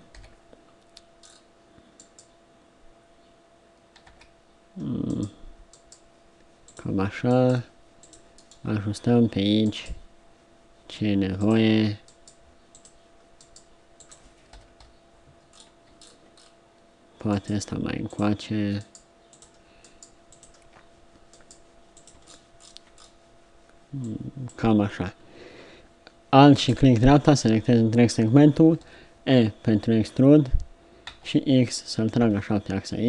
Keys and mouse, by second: 0.2 KP_3, 2.0 click, 3.8 right click, 5.7-9.7 right drag, 9.7 middle click, 9.7-11.4 right drag, 12.1 click, 14.6 KP_7, 17.4 click, 24.0 click, 28.8 e.